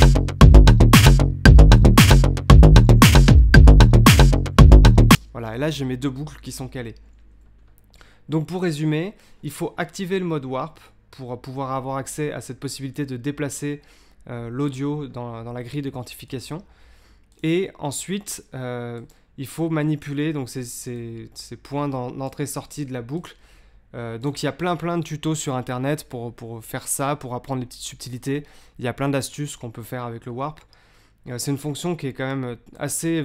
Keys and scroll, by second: 5.1 space.